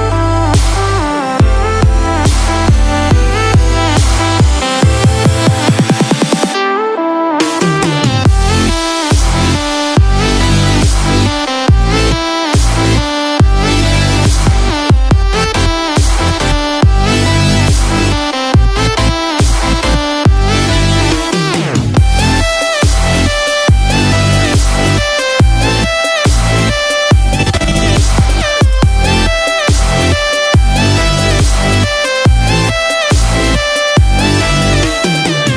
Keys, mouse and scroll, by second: 0.2 click, 0.7-1.5 scroll down 9, 1.5 middle click, 2.2-3.6 scroll up 1, 3.6 click, 3.6-4.8 scroll up 1, 4.9 scroll up 3, 5.5 middle click, 5.5 scroll up 2, 6.2-6.6 scroll up 2, 6.6 shift+middle click, 7.2-7.6 scroll up 2, 7.5 middle click, 8.4-8.8 scroll down 4, 8.8 middle click, 12.3 click, 13.0-15.0 scroll down 1, 15.7 click, 17.0 click, 25.8 click, 25.8 KP_0, 27.1 click, 31.3 click, 34.1 click, 34.1 space.